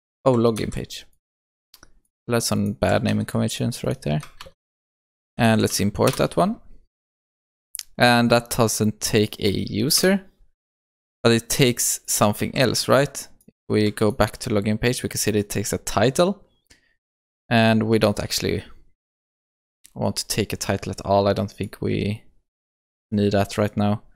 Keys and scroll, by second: 0.6 ctrl+c, 4.4 alt+Return, 12.6 ctrl+s, 14.1 ctrl+b.